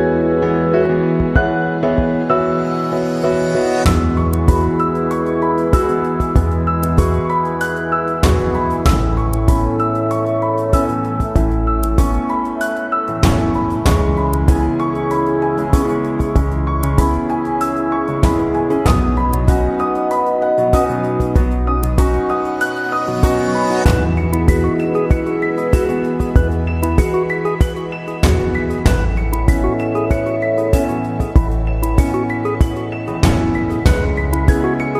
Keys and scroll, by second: 21.0 ctrl+c, 21.2 ctrl+v.